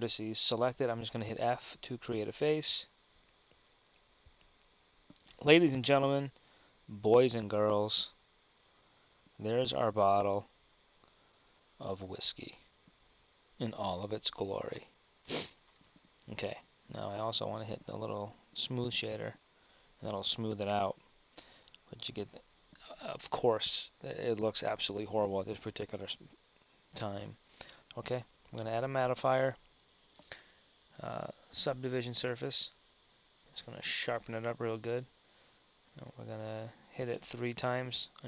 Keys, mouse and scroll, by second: 1.8 f, 2.4 z, 5.3 Tab, 7.8 KP_1, 15.6 KP_1, 19.1 click.